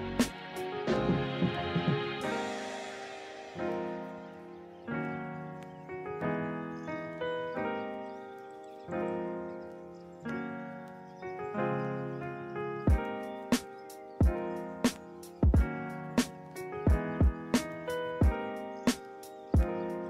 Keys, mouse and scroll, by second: 16.4 right click, 17.2 right click.